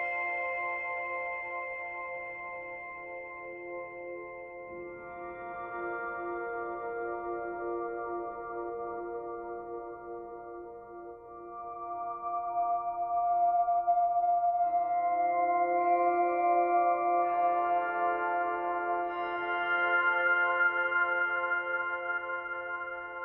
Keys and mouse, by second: 0.9 alt+click, 3.9 alt+click, 5.6 alt+click, 7.2 alt+click, 8.2-10.4 drag, 11.8 click, 13.3 alt+click, 14.8 alt+click, 15.7 alt+click, 16.1 alt+click, 16.3 alt+click, 16.6 alt+click, 17.0 alt+click, 17.5 ctrl+alt+click, 18.1 alt+click, 20.1-21.7 alt+drag.